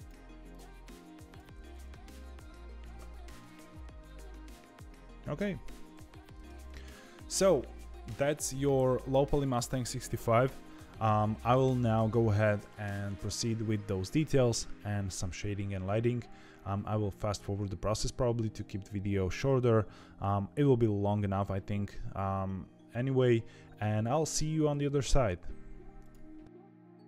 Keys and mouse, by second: 1.7 ctrl+r, 3.4 ctrl+e, 4.5 Tab, 4.7-6.2 middle drag, 6.4 ctrl+s, 26.8 Tab, 26.9 middle click, 27.0 3.